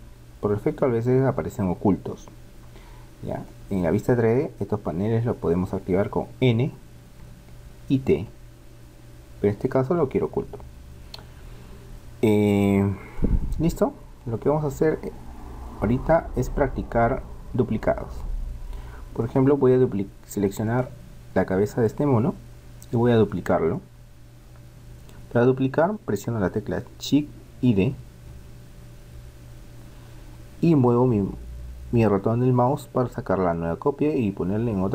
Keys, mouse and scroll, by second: 2.9-5.4 middle drag, 7.2 n, 8.2 t, 10.0 n, 10.3 t, 11.8-15.1 middle drag, 20.6-21.9 right drag, 21.9-25.1 middle drag, 28.0 shift+d.